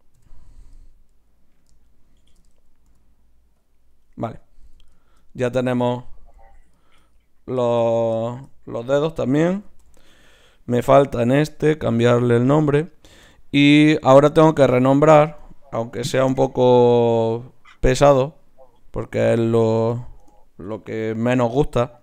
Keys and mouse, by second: 0.2 KP_7, 2.9 g, 4.7 z, 6.2 z, 9.7 ctrl+n, 9.8 right click, 11.1-12.8 right drag, 12.1-14.2 drag, 17.1-18.8 right drag, 17.8-22.0 drag.